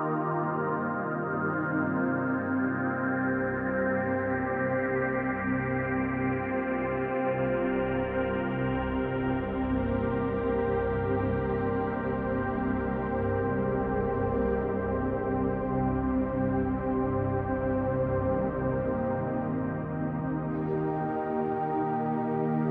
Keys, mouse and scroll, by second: 0.1 b, 3.6 click, 4.3 e, 5.5 click, 5.8-9.1 shift+middle drag, 6.6 e, 9.1 click, 9.6 e, 10.8 click, 13.8 e, 15.8 shift+click, 16.2-17.6 middle drag, 16.7 scroll up 2, 17.6 click, 18.5-22.7 middle drag, 19.5 f, 20.3 scroll down 2, 21.4 scroll down 2.